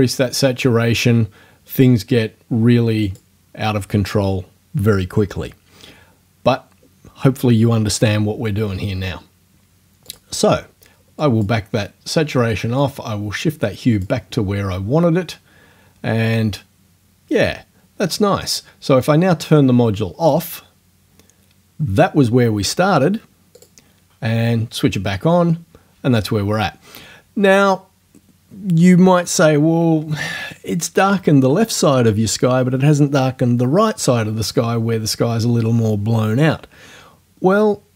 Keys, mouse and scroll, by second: 3.1 click, 10.1 click, 11.3 click, 12.8 click, 20.3 click, 23.6 click.